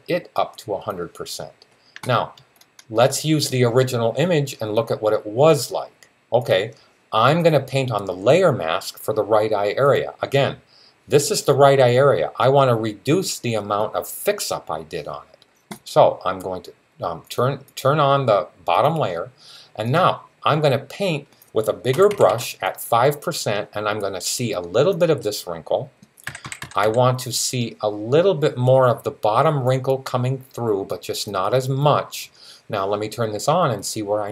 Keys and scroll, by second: 21.7-22.1 typing, 26.1-26.6 typing.